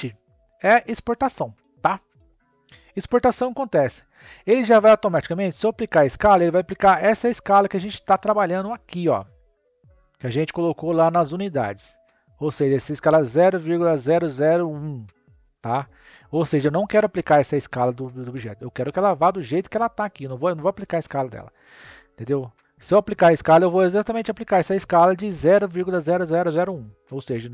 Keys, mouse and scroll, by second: 3.9 scroll down 1, 9.5 click, 11.3 click, 12.1 scroll up 2.